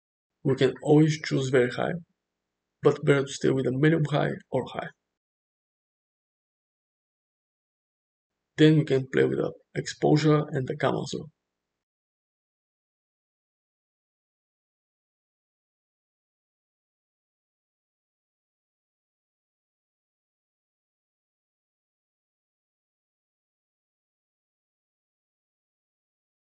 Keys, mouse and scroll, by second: 2.0 middle click, 3.1 shift+middle click, 4.4 ctrl+z, 5.3-6.9 drag, 8.2-14.2 drag, 14.8-17.9 shift+drag, 17.9-19.4 shift+middle drag, 20.9 click, 21.2 space, 21.5 space, 21.6 click, 22.2 click, 22.7 click, 23.1 space, 23.7 space, 26.0 click, 26.1-26.5 typing.